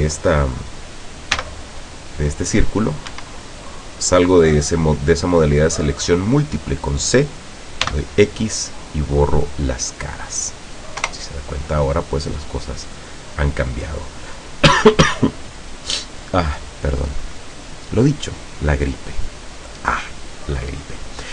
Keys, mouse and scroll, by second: 1.4 c, 3.2 Escape, 7.9 x, 9.5 click, 11.1 KP_0, 13.8 click, 20.4-20.7 scroll up 1.